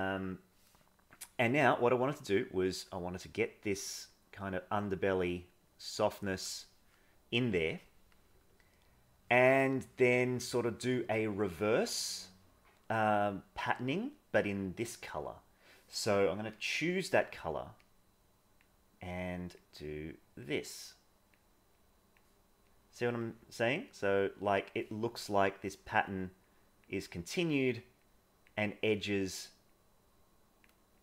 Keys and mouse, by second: 2.2-6.4 drag, 9.2 middle click, 17.8 click, 19.1 click, 19.8 click, 20.7 click, 21.7 click, 22.7 click, 23.8 click, 25.4 click, 26.5 click, 27.0 click, 28.1 click, 28.9 click, 29.7 click, 30.9 click.